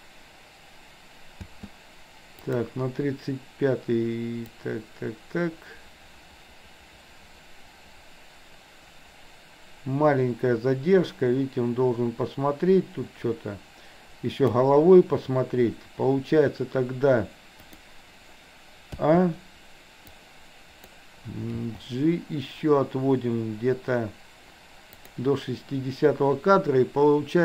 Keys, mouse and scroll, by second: 1.5 space, 2.5 click, 4.6-14.7 drag, 19.1 a, 20.1-21.0 drag, 21.6 g.